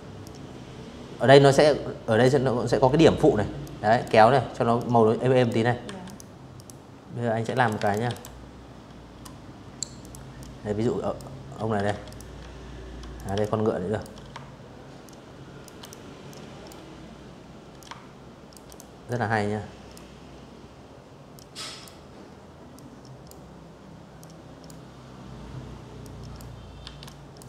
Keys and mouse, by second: 1.3 click, 2.4 click, 3.5 v, 3.7 click, 4.2 click, 5.1 z, 5.2 click, 5.4 space, 5.5 click, 5.7 v, 5.8 click, 7.6 click, 8.0 click, 9.5 ctrl+z, 9.8 click, 10.8 click, 11.1 alt+click, 12.7 shift+click, 13.5 click, 13.9 click, 15.4 shift+click, 16.3 click, 16.7 click, 19.0 click, 20.4 click, 21.9 click, 23.7 click, 24.4 v, 24.7 click, 25.4 right click.